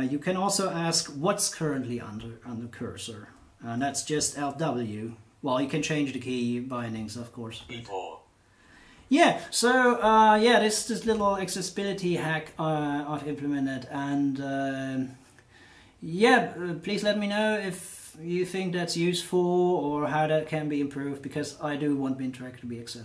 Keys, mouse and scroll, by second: 7.5 alt+w.